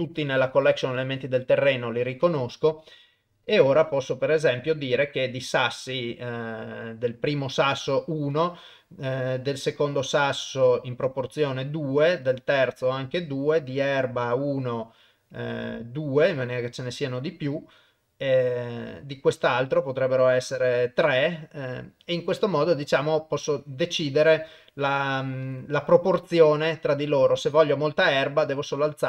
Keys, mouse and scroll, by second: 1.0 click, 2.2 click, 3.1 middle click, 3.7 middle click, 7.1 middle click, 8.3 click, 10.2 click, 11.1 click, 12.3 click, 13.0 click, 13.8 click, 16.3-16.6 drag, 18.9 click, 20.2 click, 21.3-22.8 middle drag, 23.6-24.4 drag, 25.4 click, 26.1 click, 26.7 middle click, 28.9 click.